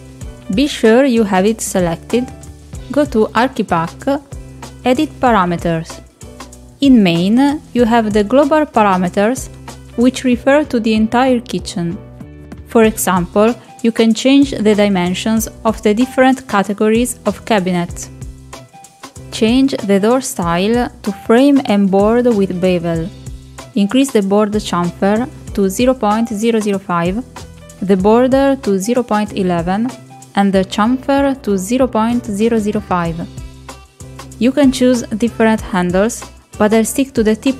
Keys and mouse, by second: 2.8 click, 4.8 click, 7.6-9.1 drag, 19.1-21.3 drag, 22.1-23.4 middle drag, 25.2-27.8 drag, 30.0 click, 30.7 click, 32.0 click, 34.3 click, 35.4-36.8 drag.